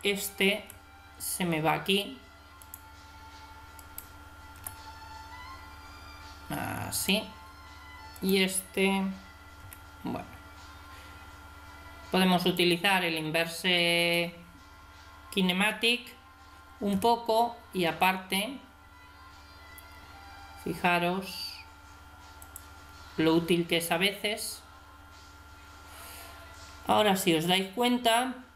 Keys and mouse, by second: 0.6 r, 3.8 right click, 4.5 g, 8.2 right click, 9.6 r, 9.7 right click, 14.0 right click, 16.9 g.